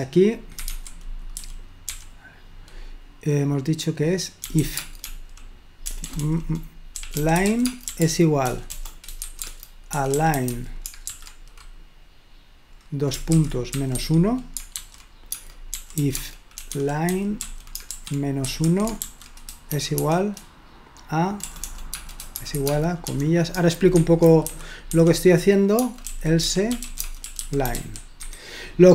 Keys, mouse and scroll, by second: 0.6 Escape, 0.7-1.9 typing, 4.3-11.0 typing, 13.8-20.0 typing, 21.5-28.2 typing.